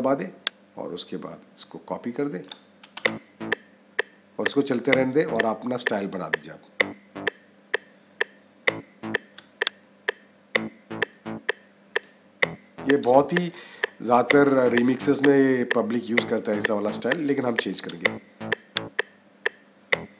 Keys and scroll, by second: 2.8 -.